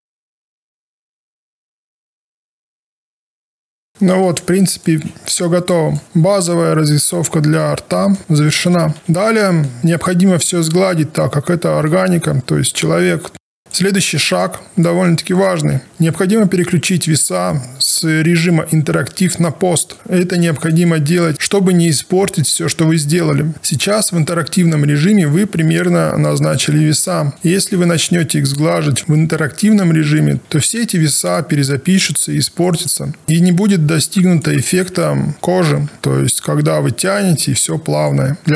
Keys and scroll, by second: 6.8 w, 8.7 ctrl+a, 9.7 ctrl+a, 23.5 Down.